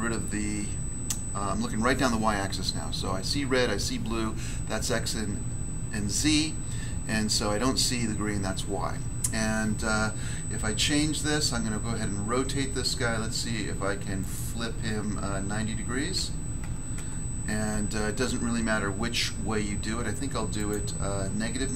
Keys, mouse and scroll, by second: 14.2 click, 16.0 9, 16.6 0, 16.9 Return, 20.5 click.